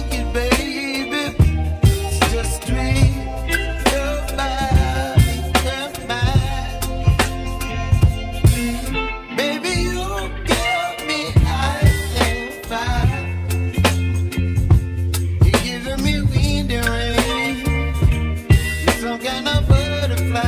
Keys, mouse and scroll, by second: 0.3 /, 1.3-1.7 scroll down 1, 2.0-4.1 middle drag, 4.1 p, 4.8 p, 5.2 Tab, 6.2 /, 6.7 click, 8.8 Tab, 9.8 Tab, 10.5 Tab, 11.3 /, 13.9-14.5 scroll down 1, 14.5-16.3 middle drag, 16.3 ctrl+r.